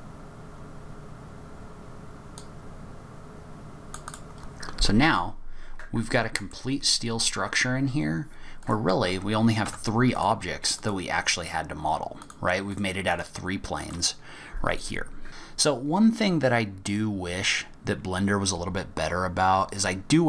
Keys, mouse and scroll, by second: 0.0 click, 0.4 click, 0.5 click, 0.9 click, 1.2 click, 1.4 click, 1.8 click, 1.9 click, 2.0 click, 2.2 click, 2.5 click, 3.0 click, 3.2 scroll up 9, 3.4 click, 3.8 scroll down 7, 3.8 middle click, 4.1 Tab, 4.1 middle click, 4.2 middle click, 4.3-4.6 scroll up 2, 5.0-5.9 scroll down 2, 6.0 middle click, 8.6 click, 9.6 Tab, 10.1 click, 10.7 click, 12.2 click, 12.6 click, 13.0 click, 13.8 click, 15.2 middle click, 19.1-19.4 scroll down 2, 19.4-20.2 scroll up 5.